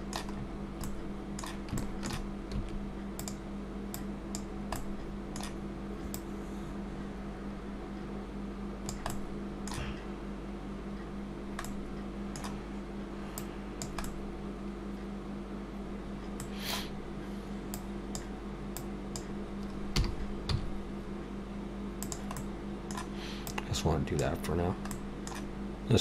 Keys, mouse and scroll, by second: 0.3 scroll up 4, 0.9 middle click, 1.8 shift+middle click, 2.6 s, 4.0 click, 4.8 middle click, 6.2 click, 9.1 middle click, 11.3 scroll down 1, 11.7 middle click, 13.4 click, 14.1 middle click, 17.7 click, 18.8 click, 20.0 r, 22.4 middle click, 23.5 click, 24.9 middle click.